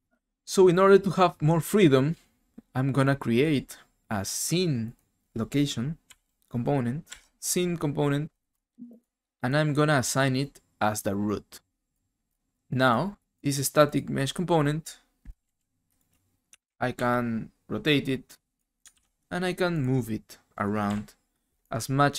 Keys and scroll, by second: 6.0 s, 7.0 c, 15.2-16.9 typing, 18.9 ctrl+z, 20.9 w.